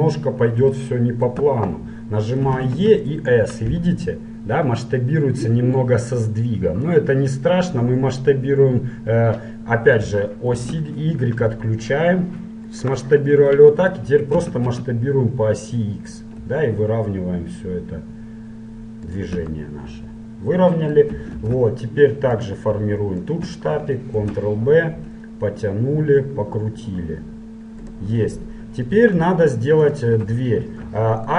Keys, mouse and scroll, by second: 0.7-2.7 middle drag, 2.7 e, 14.5 s, 19.7-21.4 middle drag, 21.5 ctrl+Tab, 23.4-25.1 right drag, 24.3 ctrl+b, 25.1 click, 28.3-30.0 middle drag, 30.0-31.3 right drag.